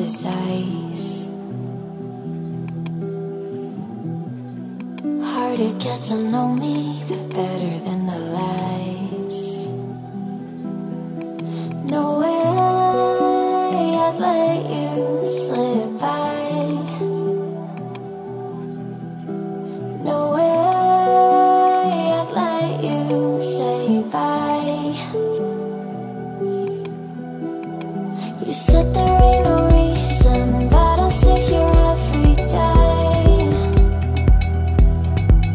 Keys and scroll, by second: 30.5 ctrl+z.